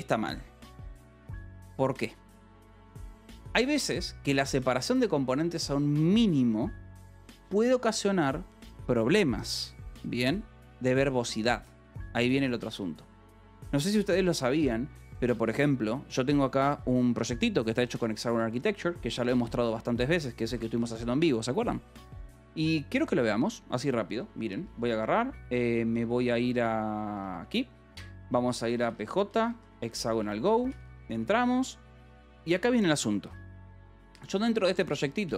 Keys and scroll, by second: 20.1 k, 20.7 k, 21.2 j, 27.7 alt+Right, 28.1-29.5 typing, 30.1 Return, 30.5 n, 30.9 Return, 34.0-35.3 typing.